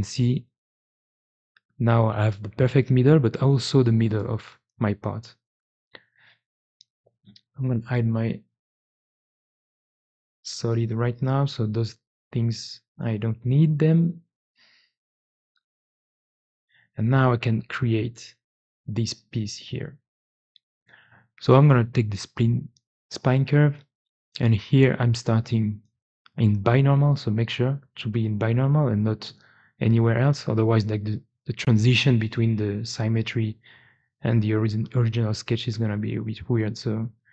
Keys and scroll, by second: 11.0 x, 11.9 x, 12.8 x, 14.4 x, 15.6 x, 36.7 Tab, 37.1 Tab.